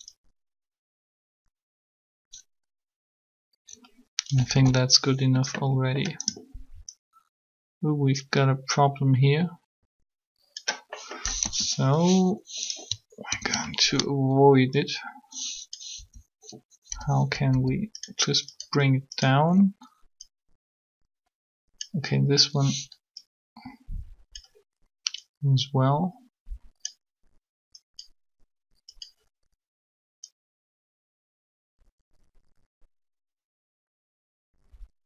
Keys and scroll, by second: 4.5 alt+a, 11.3 3, 13.3 ctrl+3, 15.9 t, 16.9 t, 17.5 r.